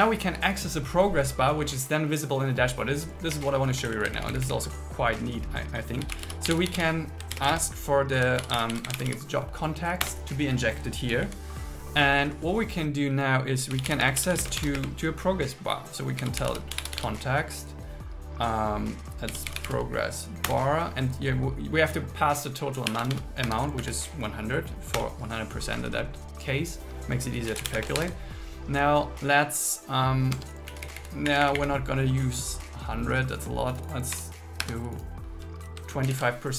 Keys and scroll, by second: 3.4 Up, 4.0 super+Right, 4.2 Left, 7.4 shift+., 7.6 space, 8.4 shift+j, 8.9 shift+c, 10.1 Return, 11.0 Down, 14.1 space, 14.6 shift+0, 14.8 space, 20.5 Return, 23.8 Right, 25.0 Return, 27.8 space, 28.0 shift+8, 30.4 Tab, 30.7 Left, 31.5 Up, 34.6 Escape, 36.1 shift+super+Left.